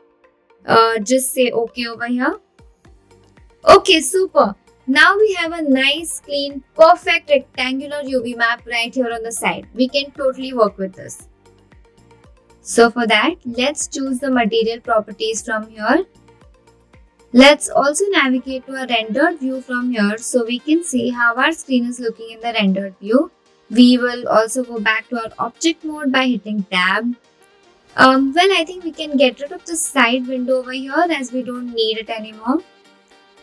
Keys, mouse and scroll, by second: 14.9 click, 16.5-18.3 middle drag, 19.1 middle click, 20.3 click, 22.0 Tab, 22.9 scroll, 23.0-23.6 scroll down 2.